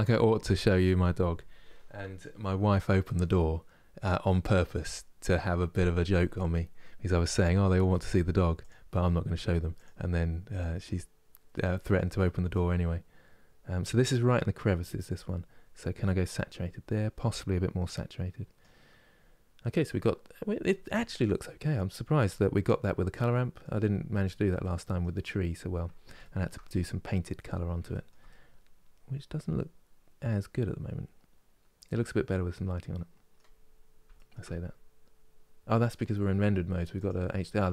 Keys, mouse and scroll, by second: 8.4-12.2 drag, 18.8 scroll down 3, 19.3-23.5 middle drag, 23.5-24.3 scroll up 4, 24.3 middle click, 24.9-25.7 scroll down 2, 25.9-27.0 shift+middle drag, 27.0 scroll up 2, 27.6-31.0 shift+middle drag, 33.3 scroll down 2, 33.8-36.7 shift+middle drag, 36.7 click, 37.4 scroll up 1.